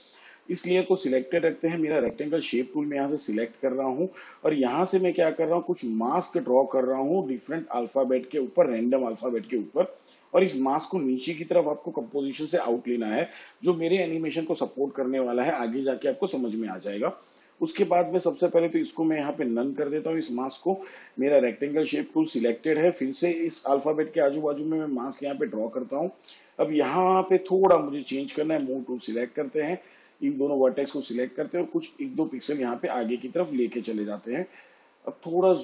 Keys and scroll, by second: 28.5 v, 31.1 Left.